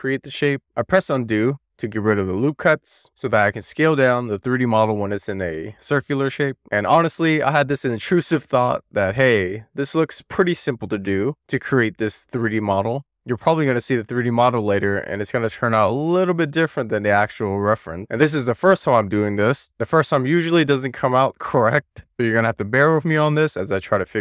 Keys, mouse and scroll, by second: 1.0-1.5 drag, 2.9 Tab, 3.2 ctrl+z, 3.8 click, 4.5 alt+z, 4.8-5.3 scroll up 1, 5.5 Tab, 5.6 Tab, 6.0 t, 6.4 click, 7.1 click, 8.0 e, 8.3 click, 8.8 w, 9.0 click, 9.8-10.4 scroll up 1, 10.5 click, 11.3 super+z, 12.9 alt+z, 13.2 scroll down 3, 13.4 middle click, 14.2 alt+z, 14.6 scroll up 3, 14.7 shift+middle click, 15.1 alt+z, 15.9 super+z, 16.1-16.5 scroll down 1, 16.5 super+z, 17.3 Tab, 17.8 w, 17.9 click, 18.5 e, 18.9 alt+r, 19.0 alt+z, 19.3 w, 19.4-19.9 scroll up 3, 19.9-20.4 scroll down 1, 21.9 middle click, 22.2 scroll down 4, 22.3-24.2 middle drag.